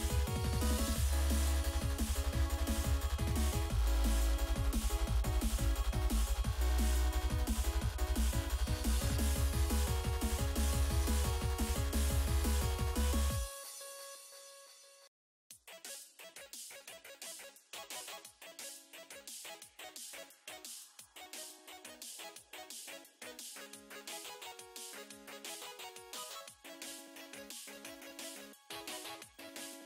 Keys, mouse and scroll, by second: 0.3 3, 1.1 click, 2.1 typing, 2.6 Return, 3.6 ctrl+click, 4.1 click, 4.2 double click, 4.9 double click, 5.4 4, 7.3 click, 8.1 typing, 8.3 Return, 9.1 ctrl+click, 10.1 double click, 10.5 double click, 11.0 click, 11.6 5, 12.4 click, 13.9 typing, 14.1 Return, 18.5 click, 18.9 shift+click, 19.2 ctrl+click, 19.8 click, 20.2 double click, 20.8 scroll up 1, 21.0-21.6 scroll down 1, 21.6 click, 22.8 typing, 23.0 Return, 23.7 click, 24.0 double click, 24.6 double click, 25.6 click, 25.6 click, 26.1 click, 26.4 click, 27.4 typing, 27.6 Return, 28.6 click, 28.8 double click, 29.5 double click.